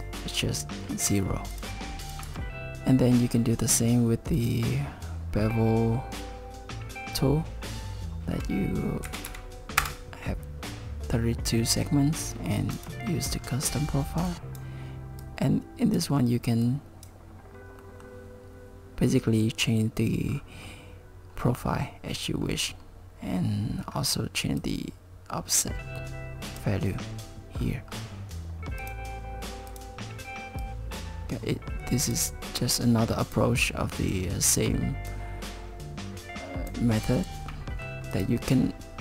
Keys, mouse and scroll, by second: 1.5 click, 2.0 click, 2.3 Tab, 4.4 click, 12.8 click, 13.3-14.3 scroll down 4, 14.3 click, 15.2 click, 16.7 click, 17.5 scroll down 1, 17.8 middle click, 20.3-21.4 scroll down 4, 21.4-22.4 scroll up 1, 22.4-23.7 scroll up 5, 23.7-24.6 scroll up 3, 24.6 click, 27.6-28.8 scroll down 6, 28.8 click, 29.7 click, 30.6 click, 32.8 click, 34.1 click, 35.1 click, 37.5 middle click, 38.1 click.